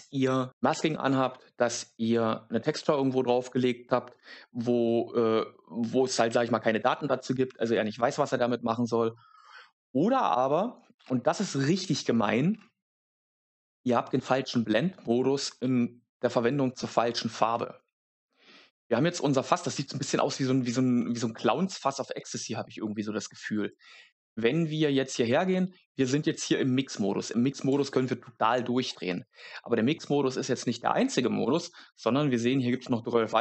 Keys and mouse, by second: 25.8 click, 28.4 click, 31.5-33.4 drag.